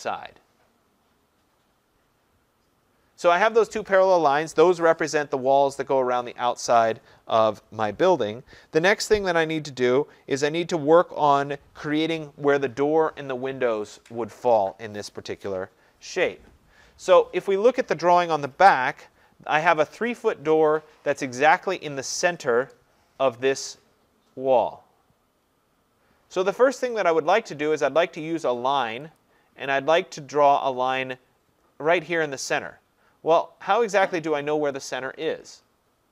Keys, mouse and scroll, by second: 2.4-2.8 scroll, 19.8 middle click, 19.9 middle click, 22.3 Return, 23.6 scroll, 29.2-34.3 drag.